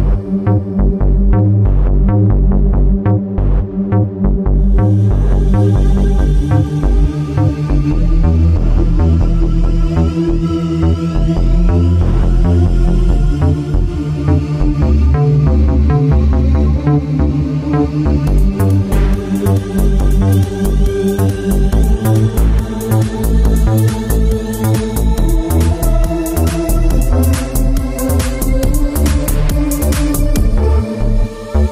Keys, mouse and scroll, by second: 0.9 ctrl+Tab, 1.5 a, 2.7 click, 3.7 1, 4.3 scroll down 3, 4.6 shift+middle click, 4.9 Tab, 7.6 click, 8.3 middle click, 9.2 middle click, 9.7 scroll up 1, 9.7-10.9 typing, 13.2 click, 14.4-16.8 typing, 16.2-17.1 click, 17.5 shift+middle click, 17.9 scroll up 1, 19.0 scroll down 1, 21.8 s, 23.7 click, 24.3 click, 25.7 click, 26.0 scroll up 3, 26.6 s, 28.0 click, 28.3 scroll up 1, 29.0 Tab, 29.4 Tab, 29.7 scroll up 1, 30.5 shift+middle click, 30.8 middle click, 31.6 shift+middle click.